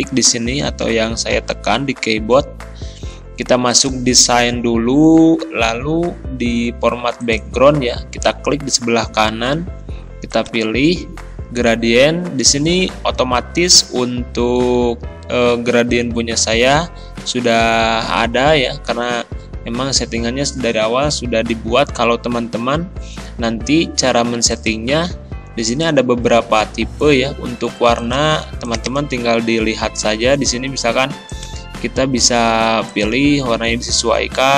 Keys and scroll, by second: 0.9 a, 1.3 s.